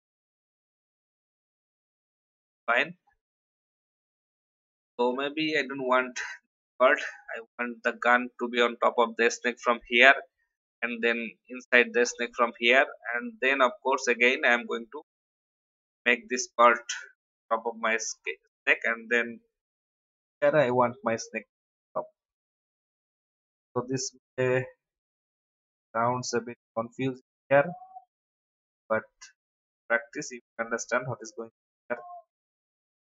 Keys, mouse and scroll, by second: 2.1 alt+scroll down 1, 3.0-3.6 alt+scroll down 1, 4.0 scroll down 1, 5.1 v, 5.5 click, 6.4 Delete, 12.0-12.4 scroll up 1, 13.3 alt+scroll up 1, 14.6-15.2 alt+scroll down 1, 15.5-16.0 scroll up 1, 16.2-16.6 scroll down 1, 18.1 scroll up 1, 19.3 alt+scroll up 1, 20.4 n, 21.3-29.9 drag, 30.3-30.8 alt+scroll up 1, 31.4-33.0 drag.